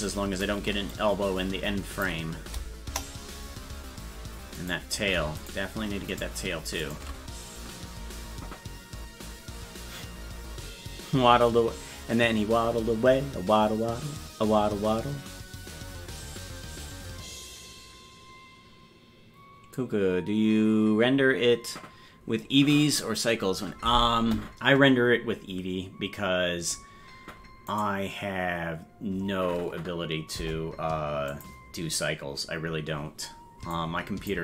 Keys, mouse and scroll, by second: 0.9-2.1 shift+drag, 2.9 KP_0, 4.8 right click, 7.1 shift+right click, 27.7 right click, 30.4 Delete, 33.8 click.